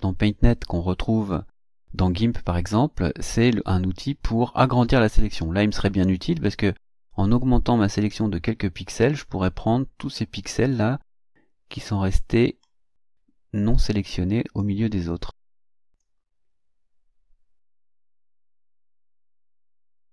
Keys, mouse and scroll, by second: 4.8 click, 6.9-14.8 drag, 16.0-18.0 drag, 19.5-20.1 ctrl+scroll down 4.